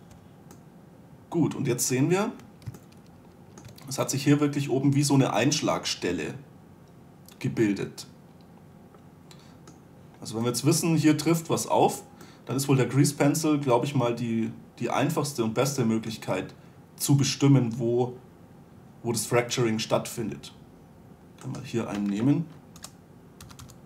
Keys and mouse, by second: 0.4 2, 2.7 middle click, 3.4 middle click, 5.8 middle click, 6.1-8.3 middle drag, 10.4-12.6 middle drag, 12.9 middle click, 13.1-16.3 middle drag, 19.9-21.2 middle drag, 21.9-23.7 right drag, 23.2 o.